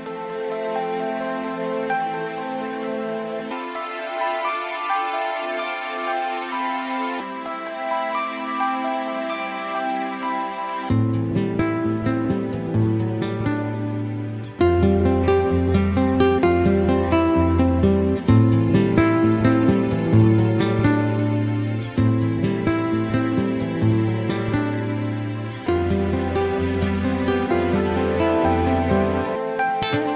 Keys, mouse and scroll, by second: 0.1 a, 4.0 click, 10.0 right click, 13.3 middle click, 16.5 click, 30.0 middle click.